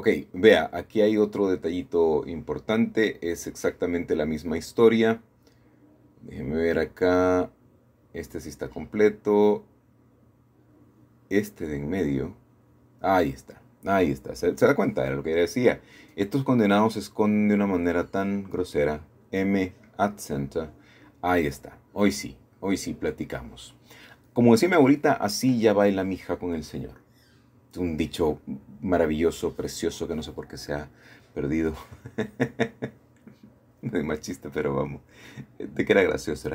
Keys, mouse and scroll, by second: 0.0 Escape, 0.4 Escape, 0.6 Escape, 2.6 1, 3.2-4.0 scroll up 1, 4.2 shift+middle click, 5.9 middle click, 7.0 click, 8.3 click, 9.6 click, 11.2 click, 12.6 g, 13.4 Escape, 16.0 click, 16.4 click, 17.4 b, 17.8 click, 19.4 m, 20.1-21.1 drag, 21.2 middle click, 24.7 scroll up 2, 24.9-26.5 scroll down 2, 27.4-28.5 drag, 28.6-31.1 middle drag, 31.8-34.4 drag, 35.4-36.5 shift+drag.